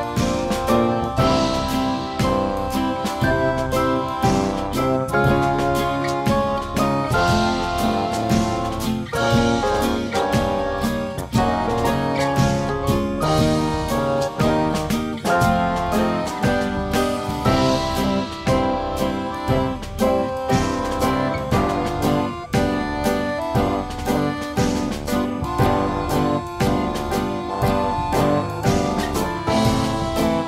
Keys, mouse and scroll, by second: 0.0 click, 1.5 click, 2.9 click, 3.7 click, 5.8 click, 6.6 click, 7.5 click, 8.9 click, 10.1 click, 11.9 click, 14.6 click, 15.7 click, 16.1 F3, 16.5 F2, 16.9 click, 17.7 click, 18.6 click, 19.5 click, 21.2 click, 22.7 click, 24.6 click, 26.8 click, 27.7 F3, 29.1 click, 30.1 click.